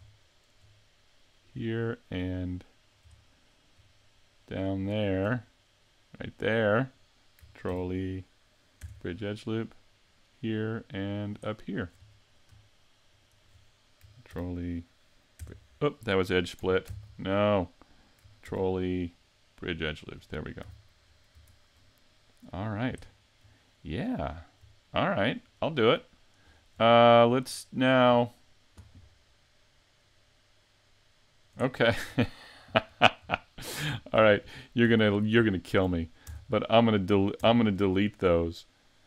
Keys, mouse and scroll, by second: 0.2 shift+middle click, 1.5 right click, 1.9 middle click, 3.2 shift+middle click, 4.0 middle click, 6.3 shift+right click, 7.7 ctrl+e, 10.1 right click, 10.6 middle click, 11.5 shift+middle click, 12.1 middle click, 13.1 shift+right click, 14.3 ctrl+e, 16.9 z, 18.5 ctrl+e, 20.6 a, 21.1-22.1 scroll down 6, 21.4 Tab, 22.2 middle click, 23.1 shift+middle click, 23.7-24.3 scroll up 2, 24.3 scroll down 2, 24.9 shift+middle click, 25.4 scroll up 1, 25.9 middle click, 26.5 scroll up 4, 26.9 shift+middle click, 30.6 middle click, 31.7 shift+middle click, 32.6-32.9 scroll down 3, 32.9 scroll up 2, 33.4 shift+middle click, 34.2 super+z, 34.9 super+z, 35.4 super+z, 36.3 Tab, 37.5 Tab.